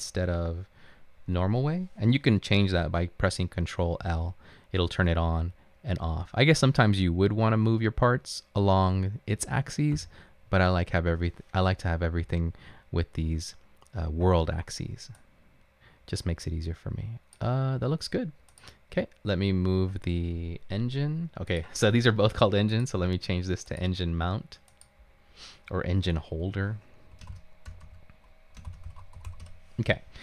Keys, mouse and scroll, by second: 4.0 ctrl+l, 10.0 ctrl+l, 10.1 ctrl+l, 27.1-29.8 typing.